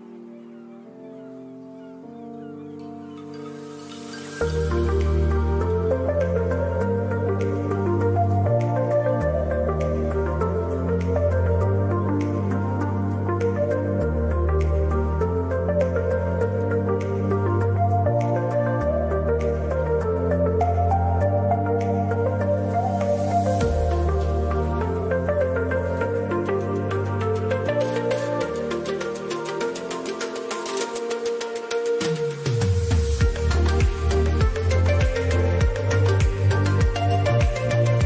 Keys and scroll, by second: 5.0 ctrl+KP_Subtract, 5.2 ctrl+KP_Subtract, 8.6 space, 9.1 ctrl+KP_Add, 9.2 ctrl+KP_Add, 26.7 ctrl+z, 26.7 ctrl+z, 35.7 space, 36.2 ctrl+KP_Subtract, 36.4 ctrl+KP_Subtract, 36.4 ctrl+KP_Subtract.